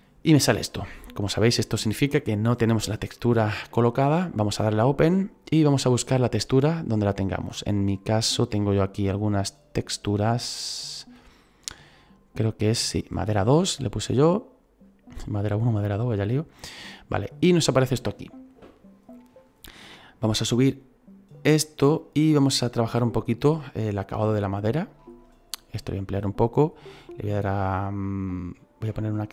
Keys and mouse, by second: 4.6 click, 6.8 click, 12.9 click, 14.1 click, 21.3 click, 24.4 shift+middle click, 26.2 shift+middle click, 28.0 middle click, 29.0 shift+middle click.